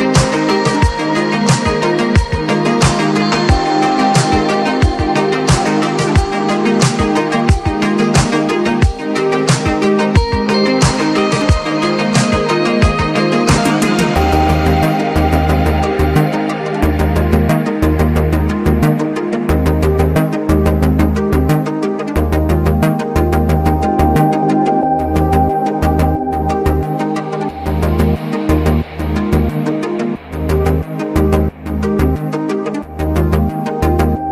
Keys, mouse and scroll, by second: 0.3 click, 0.3 click, 2.8 click, 4.5 click, 7.3 click, 8.3 click, 9.5-11.0 drag, 11.0-15.9 drag, 16.1 click, 17.4 click, 18.6 click, 19.8-24.3 drag, 24.3 ctrl+z, 25.2-27.6 drag.